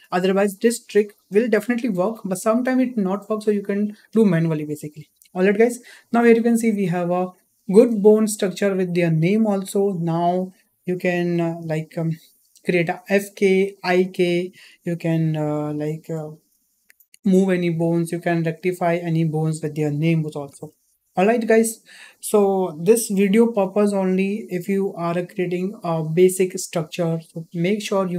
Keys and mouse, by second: 7.5 shift+middle drag, 8.3-8.8 middle drag, 10.1 click.